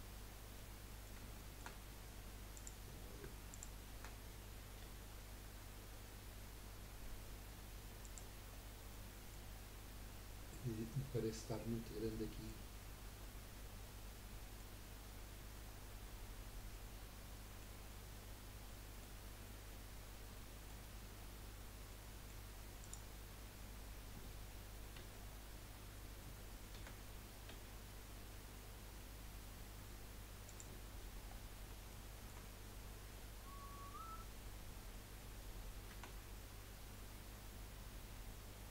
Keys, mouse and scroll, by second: 0.7-1.9 middle drag, 1.9 scroll up 1, 2.5 click, 3.5 shift+click, 4.8 g, 8.7 scroll down 3, 9.0 middle click, 9.5-10.2 scroll up 3, 11.0-15.0 middle drag, 15.0 scroll down 1, 17.6-19.3 middle drag, 19.3 scroll up 1, 19.7-22.8 middle drag, 22.8 click, 24.9 g, 26.7 a, 27.5 g, 30.8-31.2 scroll down 1, 31.2-31.9 scroll up 1, 31.9-35.0 shift+middle drag, 35.9 r.